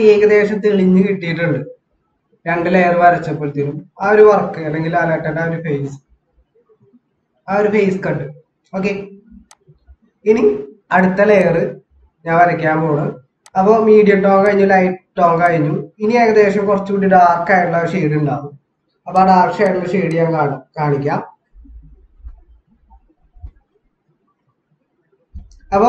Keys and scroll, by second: 8.5 ctrl+=.